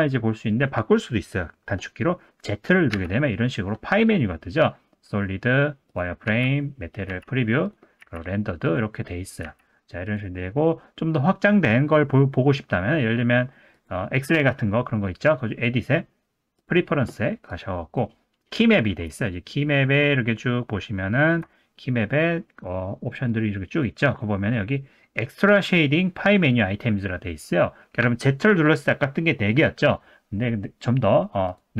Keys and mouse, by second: 0.3 middle click, 2.9 z, 6.3 z, 7.1 z, 8.0 z, 9.4 z, 13.8-17.5 drag.